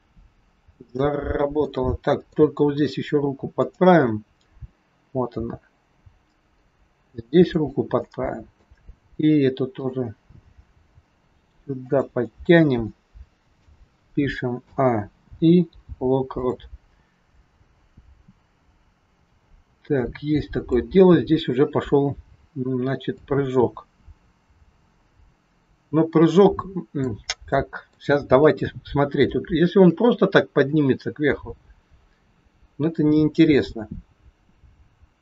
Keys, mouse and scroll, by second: 1.7 middle click, 2.7-3.7 scroll up 4, 3.7 click, 5.3 g, 7.9 middle click, 9.6 click, 10.7 g, 12.3 middle click, 14.6 a, 15.3 i, 17.4 click, 21.2-23.2 scroll down 6, 23.2 click, 27.5 middle click, 28.4 KP_3, 29.4 shift+middle click, 30.6 click.